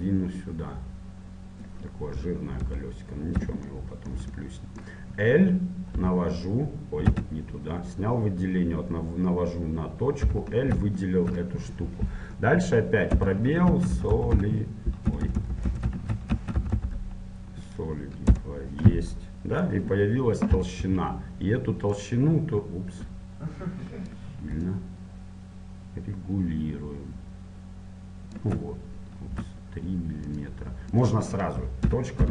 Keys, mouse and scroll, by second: 2.9 KP_1, 3.9-7.3 middle drag, 6.1 l, 7.3 a, 10.4 l, 11.1 middle click, 18.5 BackSpace, 19.3-22.3 middle drag, 22.3 F6.